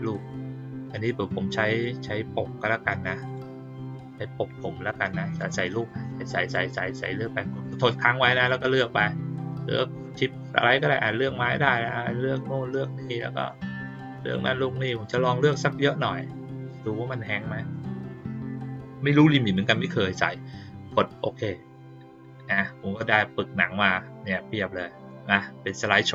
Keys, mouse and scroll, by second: 3.2 click, 5.2 ctrl+click, 5.7 ctrl+click, 6.0 ctrl+click, 6.4 ctrl+click, 6.7 ctrl+click, 7.1 ctrl+click, 7.5 ctrl+click, 7.8 ctrl+click, 8.3 ctrl+click, 9.0 middle click, 10.6 ctrl+click, 11.0 ctrl+click, 11.4 ctrl+click, 11.7 ctrl+click, 12.6 middle click, 13.3 ctrl+click, 13.7 ctrl+click, 14.1 ctrl+click, 14.5 ctrl+click, 14.9 ctrl+click, 15.3 ctrl+click, 16.1 ctrl+click, 17.7 ctrl+click, 21.0 click, 23.9-26.1 drag.